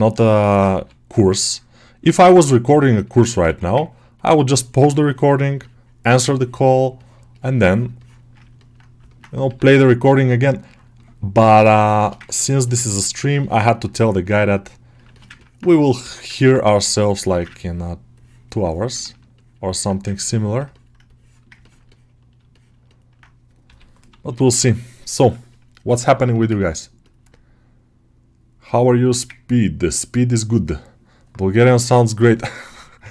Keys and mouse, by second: 0.1 shift+middle click, 0.3 middle click, 1.1-2.9 drag, 2.9 ctrl+middle click, 3.2 middle click, 3.3 1, 4.3 ctrl+click, 4.9 ctrl+click, 5.5 alt+middle click, 6.2-7.2 ctrl+drag, 7.5 ctrl+click, 7.8 ctrl+click, 8.4 middle click, 9.0 middle click, 10.0-11.9 drag, 11.9 alt+shift+middle click, 12.1 ctrl+middle click, 12.4 middle click, 13.3 ctrl+alt+middle click, 13.6 middle click, 14.1 click, 15.0 alt+shift+middle click, 15.2 ctrl+middle click, 16.0 middle click, 16.2 ctrl+middle click, 16.6 right click, 17.2 middle click, 17.4-18.9 ctrl+drag, 18.9 middle click, 19.2-20.8 alt+shift+middle drag, 20.9 right click, 21.5 ctrl+alt+middle click, 21.8 middle click, 22.4 alt+shift+middle click, 22.8 middle click, 23.5 g, 24.0 ], 24.2 ], 25.8 ctrl+alt+middle click, 26.2 alt+shift+middle click, 26.4 ctrl+middle click, 26.9 middle click, 28.7 shift+middle click, 29.2 ctrl+alt+middle click, 32.1 middle click.